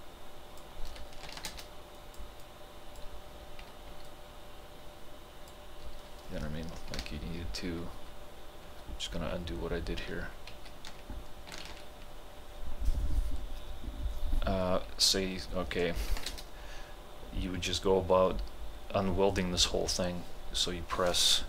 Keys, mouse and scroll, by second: 1.4 ctrl+h, 1.5 space, 2.0-3.9 drag, 3.9 t, 4.1-7.1 drag, 7.1 ctrl+z, 11.7 ctrl+z, 16.0 ctrl+z, 16.1 ctrl+h, 16.3 space.